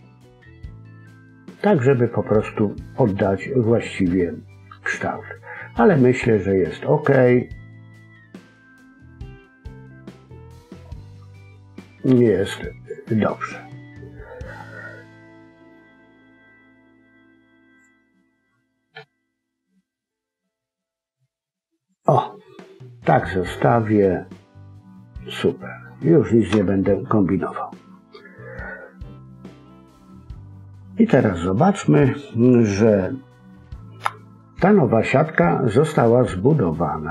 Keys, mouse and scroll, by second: 15.0 middle click, 15.8-16.7 scroll up 1, 17.7 click, 22.2-22.9 scroll down 2, 22.4 middle click, 26.4 KP_1, 27.9 a, 29.2 scroll down 1, 36.4-37.1 scroll up 2.